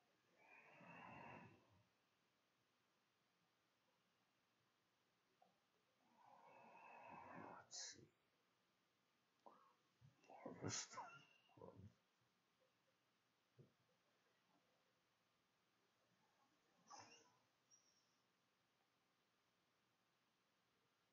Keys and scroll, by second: 1.7-2.8 typing.